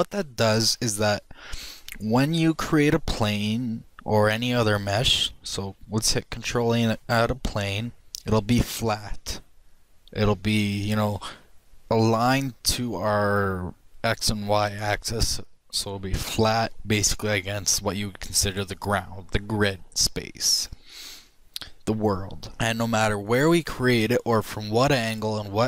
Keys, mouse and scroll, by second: 1.2 middle click, 1.8-4.3 middle drag, 7.0 shift+a, 11.3 middle click, 23.8 click, 24.4-25.6 middle drag.